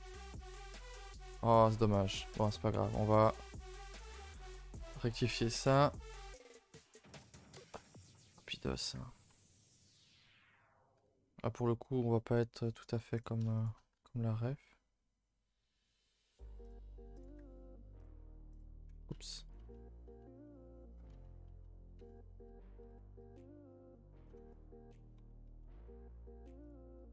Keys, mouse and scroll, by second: 1.2 z, 1.5 shift+middle drag, 1.7 scroll up 1, 2.0-2.4 scroll down 1, 2.4 click, 3.1 click, 3.8 h, 4.2 click, 4.3 Tab, 4.6 a, 4.8 a, 5.8 click, 6.8 a, 6.9 a, 7.8 c, 8.9 g, 10.1 click, 11.0 g, 13.2 click, 13.7 shift+click, 14.0 g, 17.2 click, 17.3 g, 18.6 click, 19.0 ctrl+z, 19.2 ctrl+z, 19.6 ctrl+z, 20.1 ctrl+z, 21.5 ctrl+z, 21.9 ctrl+z, 23.2 c, 24.5 g, 25.5 s, 27.0 g.